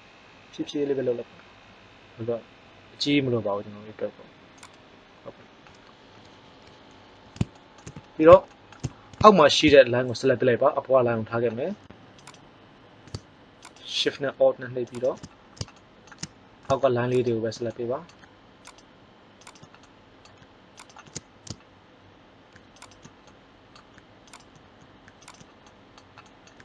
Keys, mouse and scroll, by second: 4.7 click, 17.1-19.4 drag.